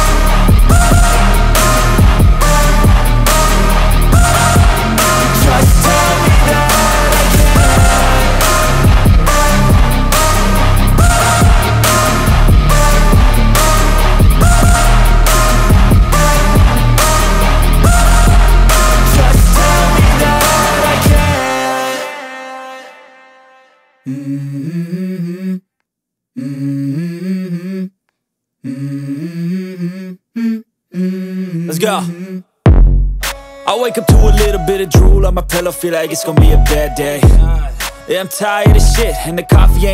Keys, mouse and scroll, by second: 2.1 ctrl+super+z, 15.8 ctrl+super+z, 16.8 ctrl+super+z, 18.0 ctrl+super+z, 25.1 ctrl+super+z, 37.2 ctrl+super+z, 38.2 ctrl+super+z.